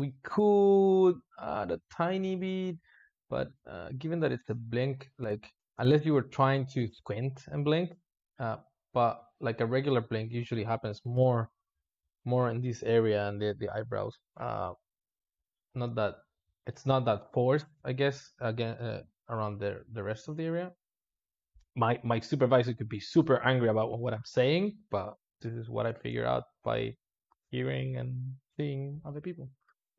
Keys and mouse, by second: 0.7 g, 3.0 click, 5.6 space, 20.4 click, 25.3 `, 25.9 space.